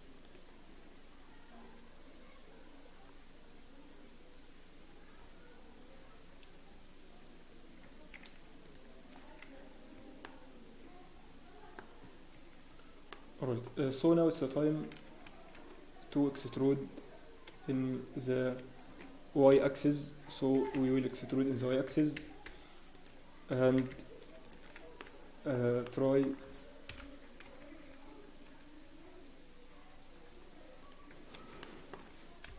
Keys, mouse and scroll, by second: 0.2 click, 0.6 scroll down 1, 2.4-3.0 scroll up 1, 4.3-4.7 scroll down 1, 5.1-5.4 scroll up 6, 6.6-7.0 scroll down 7, 7.8 scroll up 8, 8.6 alt+click, 8.6-9.5 scroll down 9, 9.1-9.5 scroll up 3, 9.6 Tab, 9.6-9.9 scroll down 2, 9.9 Tab, 10.2 middle click, 11.9-12.2 scroll up 3, 12.0 Tab, 12.3 Tab, 12.6-13.1 scroll down 1, 13.1 middle click, 14.1 Tab, 14.1 scroll down 2, 14.9 Tab, 14.9 a, 16.0-16.6 scroll up 1, 16.0 a, 16.6 e, 19.6 KP_7, 20.0-20.5 scroll up 1, 20.5 g, 21.8 scroll up 1, 21.8 s, 24.3 g, 25.0 Tab, 25.0 middle click, 25.5 Tab, 25.8 middle click, 26.8 KP_3, 27.6 shift+z, 27.9-28.8 scroll up 1, 29.8-30.2 scroll down 1, 30.8 click, 30.8 scroll up 1, 31.6 shift+middle click, 31.6-31.9 scroll down 8.